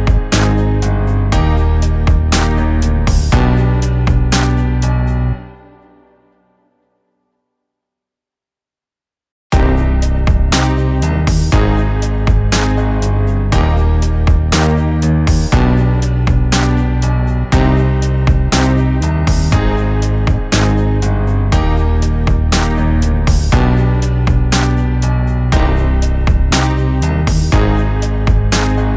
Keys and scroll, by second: 0.7 ctrl+z, 1.2 ], 1.6 ctrl+z, 1.8 ], 5.2 ctrl+t, 18.3 Right, 19.2-20.4 Right, 20.9 Delete, 22.4 ctrl+t.